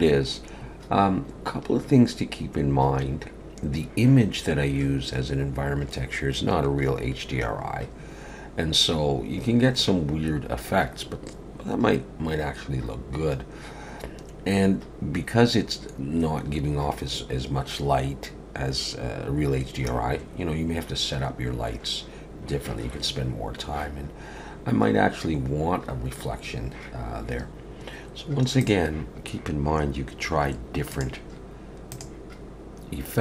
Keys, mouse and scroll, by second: 27.0 shift+middle click, 28.6 click.